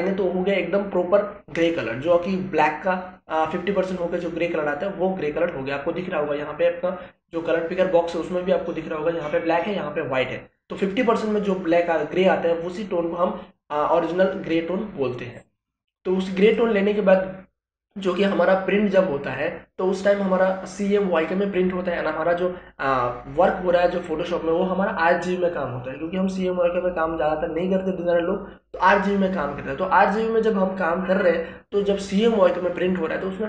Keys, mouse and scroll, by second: 16.4 click.